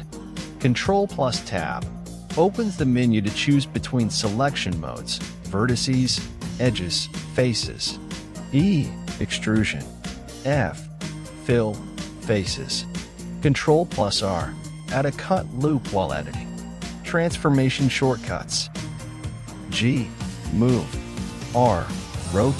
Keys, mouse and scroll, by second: 1.2 Tab, 3.2 click, 3.9 right click, 4.7 e, 7.8-10.2 shift+middle drag, 10.2 x, 13.5 click, 14.3 right click, 15.4 f, 16.5-19.2 shift+middle drag.